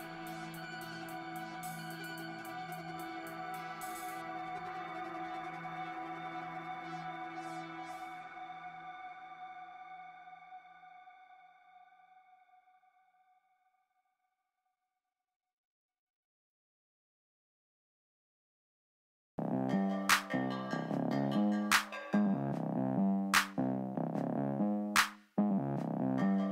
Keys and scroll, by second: 7.5 ctrl+z, 7.7 ctrl+z, 8.3 ctrl+z, 15.7 f, 18.9 l, 21.0 f, 24.7 s.